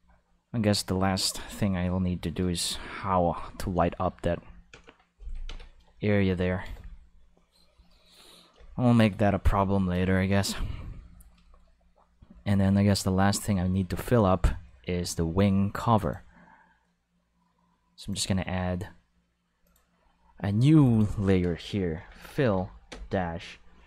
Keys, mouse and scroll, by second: 4.7 Home, 5.4 ctrl+s, 6.4 ctrl+s, 13.3 click, 16.0 click, 17.9 click, 19.6 click, 20.8 click, 20.9 click, 21.9-22.9 typing.